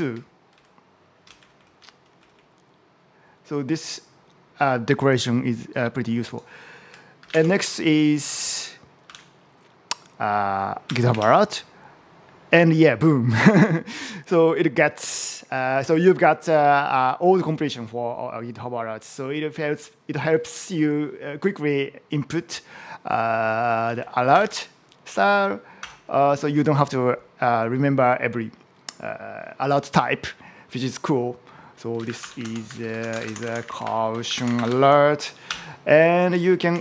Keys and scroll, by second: 0.0 Right, 1.1 Right, 1.2 Down, 1.6 Up, 2.1 Down, 7.0 shift+., 7.1 space, 8.9 [.